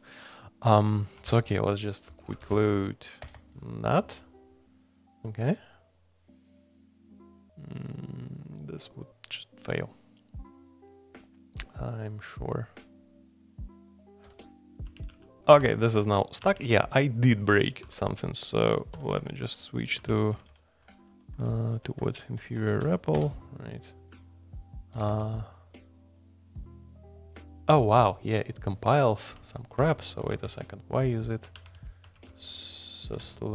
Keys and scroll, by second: 1.8-3.0 typing, 3.2 Return, 3.3 Return, 14.8 Escape, 15.1-16.4 typing, 16.4 Escape, 17.8-22.8 typing, 23.1 Return, 24.7-26.0 typing, 29.3 Escape, 29.8-32.1 typing, 32.0 Escape, 32.3 Tab, 33.2 shift+g.